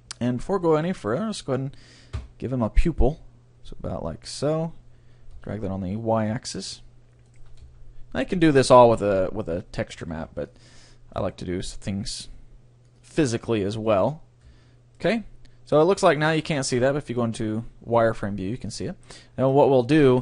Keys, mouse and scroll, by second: 0.6-3.2 right drag, 2.2 e, 6.7-8.6 drag, 7.3-9.0 right drag, 7.6 s, 10.1 ctrl+r, 10.9-12.6 drag, 11.1 s, 13.0-14.8 drag, 14.5 Tab, 14.8-15.8 middle drag, 16.4 z.